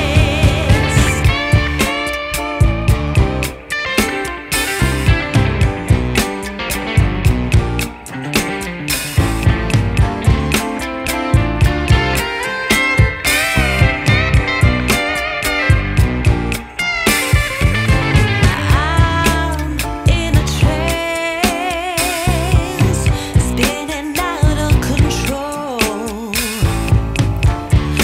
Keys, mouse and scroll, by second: 0.4 ctrl+shift+click, 2.3 right click, 2.8 scroll down 1, 2.9 scroll up 1, 3.1 right click, 3.7-4.2 scroll up 1, 4.6 ctrl+shift+click, 6.6 ctrl+shift+click, 7.0 right click, 8.2-9.4 typing, 9.5 Return, 11.9 click, 12.4 right click, 13.4 scroll down 1, 13.5 scroll up 1, 13.8 right click, 14.3 scroll up 1, 15.1 ctrl+shift+click, 15.5 scroll down 1, 15.7 scroll up 1, 16.7 ctrl+shift+click, 18.1 ctrl+shift+click, 18.5 scroll down 1, 18.7-19.0 scroll up 1, 19.5 ctrl+shift+click, 19.9 scroll down 1, 20.2 scroll up 1, 23.7 Return, 27.8 click.